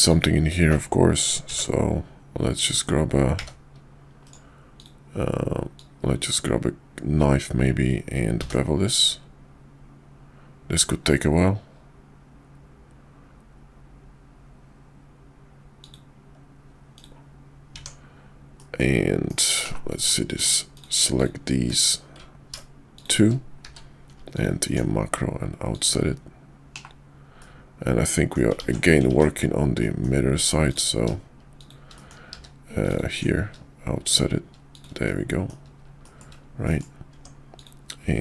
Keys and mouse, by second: 0.0 click, 1.4 d, 3.3 d, 4.7-16.5 drag, 17.7 Tab, 18.5 middle click, 19.3 KP_5, 19.6 /, 20.3 middle click, 20.7 click, 21.2 ctrl+click, 21.8 click, 22.9 shift+click, 23.6 q, 27.4 middle click, 27.4 /, 28.6 ctrl+z, 29.8 middle click, 30.7 click, 31.6 click, 31.9 middle click, 32.3 q, 35.1 middle click, 36.0 shift+middle click, 36.6 middle click, 37.1 Tab, 37.5 click.